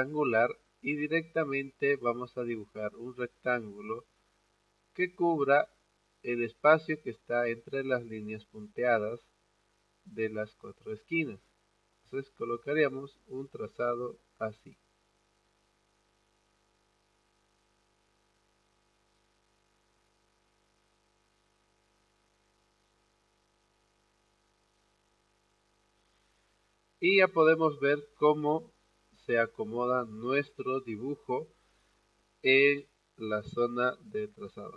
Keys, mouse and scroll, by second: 11.6-24.3 drag, 25.5 click.